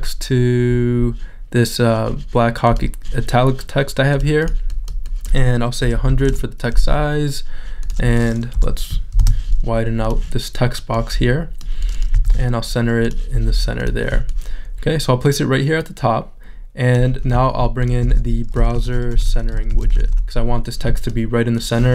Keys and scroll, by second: 5.8 |, 7.3 Return, 8.5 BackSpace, 10.2 space, 13.0 super+a, 21.1 r.